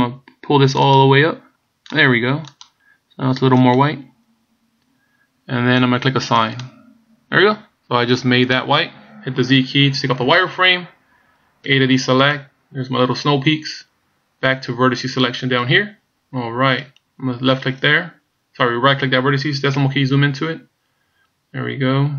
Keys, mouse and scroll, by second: 2.6 click, 3.7 click, 6.5 click, 10.3 z, 11.8 a, 12.4 middle click, 15.6 click, 17.0 right click, 19.8 KP_Decimal, 21.1 scroll up 2, 21.7 scroll up 2.